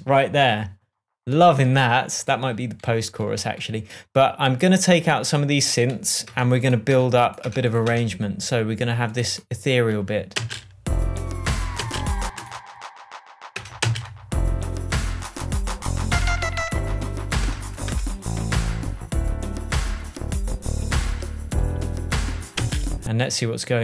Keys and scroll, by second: 6.7 BackSpace, 10.8 space, 12.2 space, 13.9 BackSpace, 14.2 space, 17.8 BackSpace, 23.0 space.